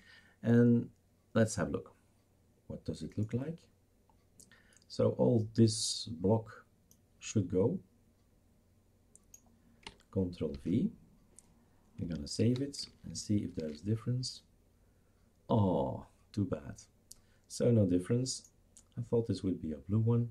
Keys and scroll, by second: 10.5 ctrl+v, 12.4 ctrl+s, 13.6 shift+super+r.